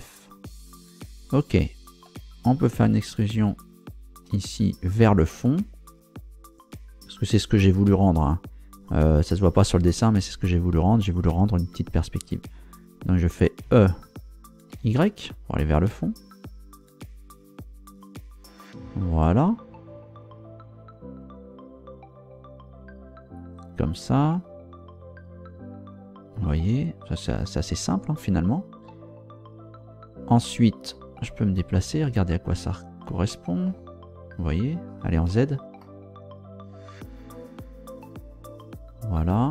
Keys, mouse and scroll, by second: 1.7 right click, 2.3 shift+right click, 3.2 shift+right click, 3.8 shift+right click, 13.6 e, 14.7 y, 23.4 click, 30.9-33.9 middle drag, 34.0-34.4 scroll up 1, 35.3 z, 35.8-39.5 middle drag.